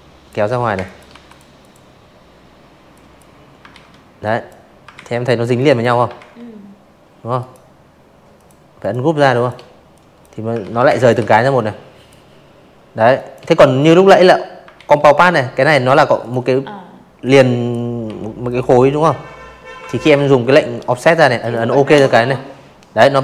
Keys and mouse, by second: 0.6 ctrl+z, 1.1 click, 1.8 ctrl+z, 2.5 drag, 3.1 ctrl+z, 4.3 right click, 5.3 click, 5.7 click, 6.1 space, 6.2 click, 6.9 click, 7.5 ctrl+z, 7.8 space, 7.8 click, 8.1 v, 8.4 click, 9.9 space, 10.1 click, 10.3 v, 10.7 click, 11.6 ctrl+z, 13.1 click, 14.1 click, 15.0 Delete, 15.4 click, 17.0 ctrl+q, 18.3 click, 19.9-20.7 shift+drag, 21.3 space, 21.4 click, 21.6 v, 21.8 right click.